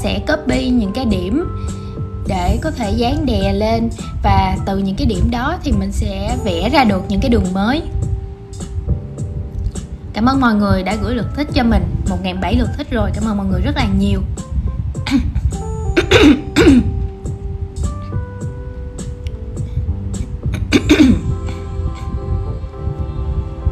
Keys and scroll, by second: 3.6 super+c, 4.1 shift+super+v, 7.8 super+c, 8.6 shift+super+v.